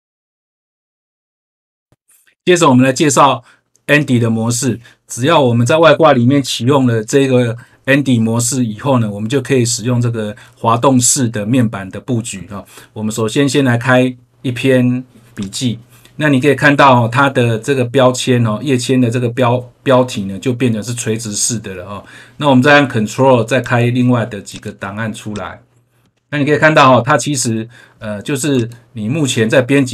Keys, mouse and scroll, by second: 15.3 click, 23.5 ctrl+click, 24.4 ctrl+click, 25.2 ctrl+click, 28.5 click.